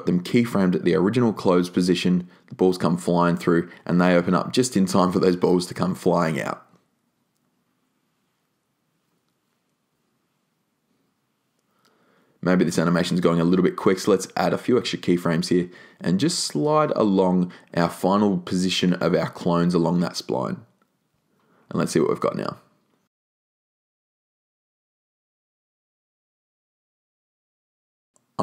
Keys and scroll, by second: 15.4-16.4 typing.